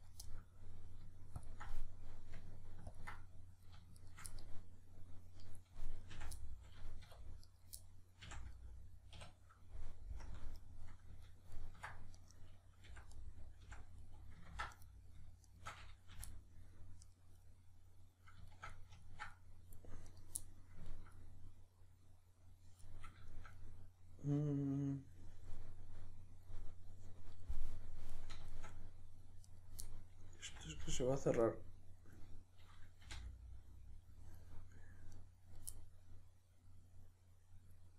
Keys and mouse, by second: 0.3-1.4 middle drag, 1.4-1.7 ctrl+drag, 1.7-2.9 middle drag, 2.9 ctrl+click, 3.2-4.0 middle drag, 4.0 shift+right click, 4.3-12.1 middle drag, 6.1 f, 7.0 2, 7.4 right click, 8.2 f, 9.2 \, 10.2 KP_Decimal, 12.1 right click, 12.9 f, 13.1-14.7 middle drag, 13.7 f, 14.5 ctrl+z, 14.7 right click, 15.5 shift+right click, 16.1 f, 16.3-17.1 middle drag, 17.1 right click, 17.5-19.3 middle drag, 20.1 right click, 20.4-29.5 middle drag, 29.5 right click, 29.9-35.1 middle drag, 30.5 f, 33.1 f, 35.1 right click, 35.7-37.9 middle drag.